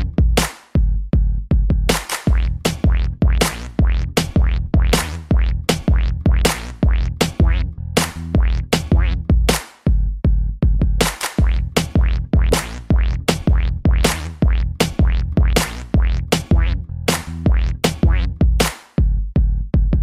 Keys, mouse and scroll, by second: 0.8 scroll down 3, 1.0 middle click, 1.6 shift+space, 2.6 Escape, 3.9 click, 9.3 shift+space, 10.2 Escape, 10.6 ctrl+s, 10.9 scroll down 2, 11.2 shift+middle click, 11.6 middle click, 12.1 scroll up 2, 12.3 a, 12.5 middle click, 13.1 ctrl+s, 13.3 shift+middle click, 13.5 middle click, 13.9 shift+Left, 14.3 shift+space, 15.6 Escape, 17.1 click, 19.7 click, 19.8 click.